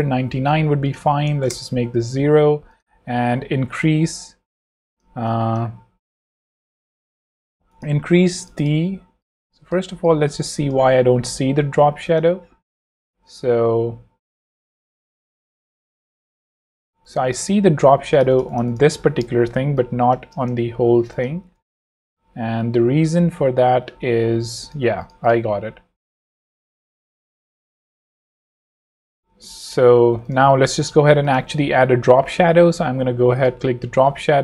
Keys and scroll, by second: 1.3 0, 1.4 Return, 8.3 super+z, 9.1 z, 9.6 v, 9.8 space, 17.0 z, 18.9 v, 19.4 space, 20.5 super+space, 24.9 super+z, 25.9 z, 28.1 super+v, 28.5 super+z, 29.8-30.6 typing, 30.8 super+z, 31.0 super+v.